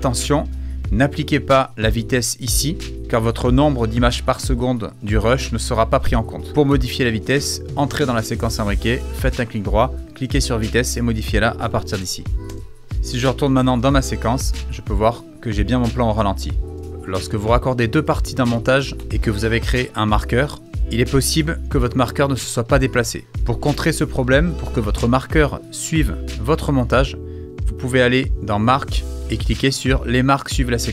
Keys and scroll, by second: 11.3-12.4 typing, 12.9 super+:, 13.7 space, 18.9 BackSpace, 23.7 super+z.